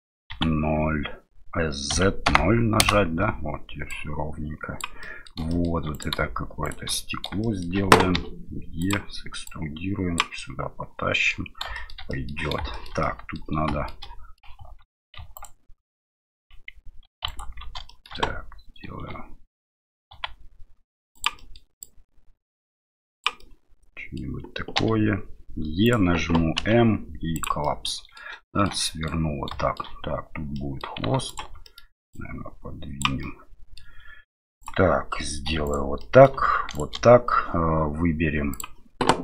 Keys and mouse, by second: 0.3 s, 4.0 click, 5.2 middle click, 5.6 shift+middle click, 5.9 right click, 6.6 shift+right click, 6.9 middle click, 7.4 shift+middle click, 8.1 e, 9.6 click, 10.5 middle click, 11.8 shift+middle click, 12.2 middle click, 12.8 shift+middle click, 13.2 middle click, 13.8 shift+middle click, 14.2 middle click, 15.3 alt+right click, 16.1 right click, 17.0 2, 17.2 alt+right click, 17.9 middle click, 18.9 e, 21.5 middle click, 21.8-23.2 drag, 23.6 middle click, 24.8 e, 26.6 m, 27.6 middle click, 28.4 middle click, 28.8 middle click, 29.5 shift+middle click, 30.5 middle click, 31.3 alt+right click, 31.6 middle click, 32.1 click, 33.4 middle click, 34.6 right click, 35.5 3, 35.6 right click, 36.0 middle click, 36.7 right click, 38.5-39.2 drag.